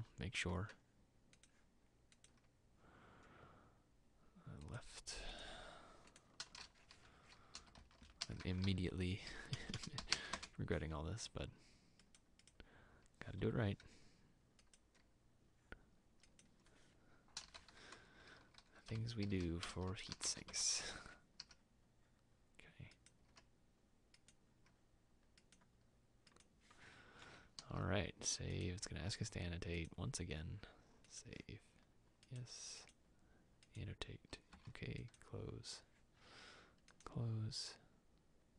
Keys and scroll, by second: 0.0 w, 12.2 Return, 27.7 ctrl+s.